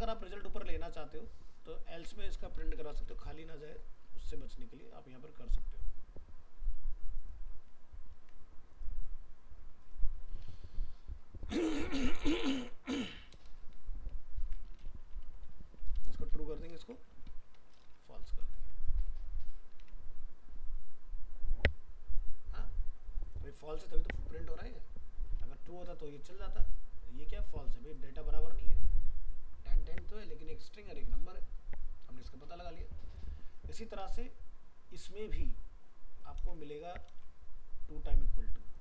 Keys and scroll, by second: 8.1 ctrl+s, 13.1 ctrl+shift+Right, 14.4 ctrl+x, 16.8 ctrl+shift+Left, 18.5 ctrl+s, 19.8 alt+Tab, 25.3 alt+Tab, 36.4 ctrl+c, 37.1 ctrl+v.